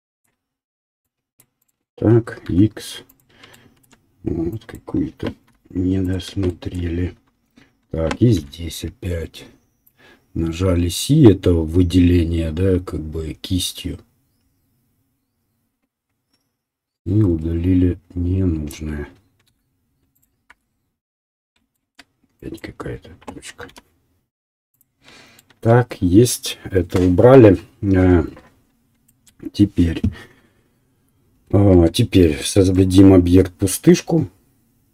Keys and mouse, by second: 2.4 x, 5.4 Delete, 6.6 shift+middle click, 8.3 c, 12.0-14.9 right drag, 14.9-17.8 drag, 17.8-23.0 right drag, 20.5 x, 23.7 Delete, 25.0-34.9 shift+right drag, 31.7 Tab, 32.3 shift+a.